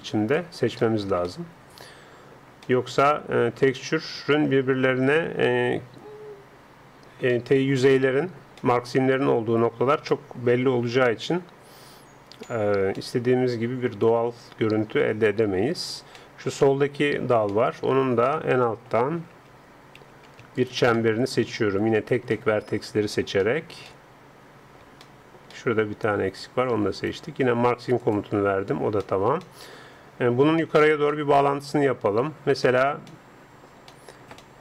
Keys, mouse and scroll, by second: 7.3-12.5 middle drag, 12.5-14.3 drag, 14.3 middle click, 16.1-18.8 middle drag, 19.3 a, 19.6 a, 20.0 a, 20.6-23.8 right drag, 24.4 middle click, 27.0-28.9 right drag, 28.1-29.9 drag, 29.8-34.6 middle drag.